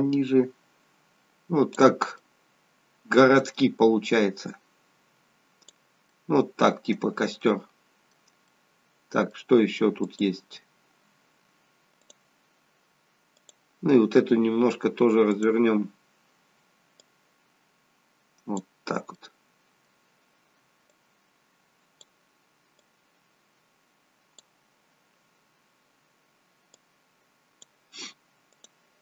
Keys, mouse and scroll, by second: 2.2 middle click, 4.5 click, 6.0 middle click, 7.4 middle click, 8.5 middle click, 10.1 click, 12.0 click, 13.6 click, 15.4 click, 17.1 click, 19.3 middle click, 20.9 click, 22.8 click, 26.7 click, 28.5 click.